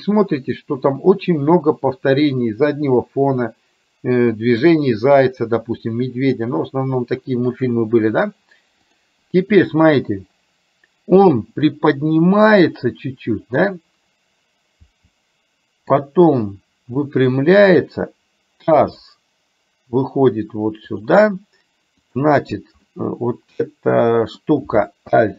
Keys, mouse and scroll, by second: 8.9 click, 11.8 click, 12.0-13.7 drag, 14.8 r, 18.8 g, 22.2 click, 22.9-24.5 middle drag.